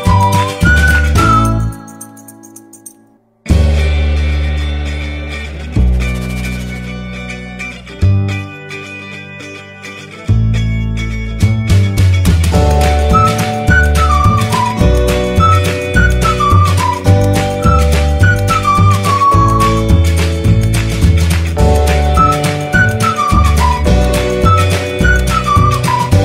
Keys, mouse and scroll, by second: 1.5 click, 3.9 click, 7.2 click, 11.8-26.2 drag.